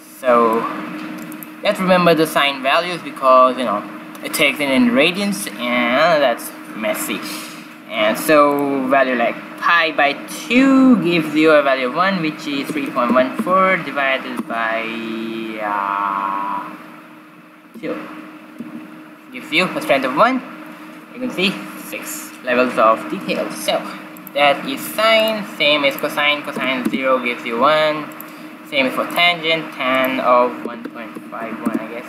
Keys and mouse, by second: 0.5-2.2 drag, 8.5-10.2 drag, 24.1-27.4 drag, 28.0-29.7 drag, 29.9-31.5 drag, 31.7 click.